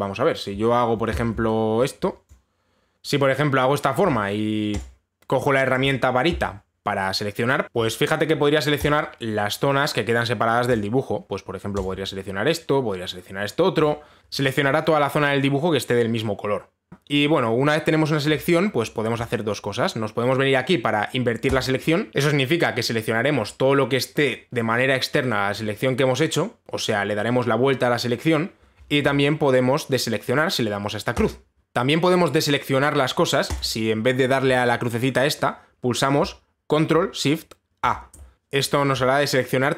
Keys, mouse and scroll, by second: 0.1 b, 1.1-2.0 w, 2.9 click, 4.4 b, 5.4 click, 7.6 ctrl+shift+a, 9.5 click, 11.3 click, 12.4 click, 16.9 click, 20.3 click, 31.3 click, 34.2-38.3 drag, 38.3 ctrl+shift+a.